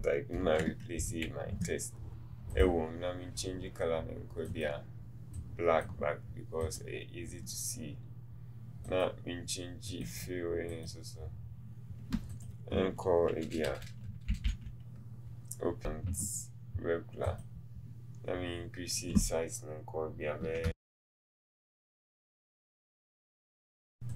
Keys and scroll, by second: 20.6 KP_2, 20.6 KP_0, 22.2 Up, 22.7 KP_2, 22.7 KP_1, 23.0 KP_2, 23.5 Up.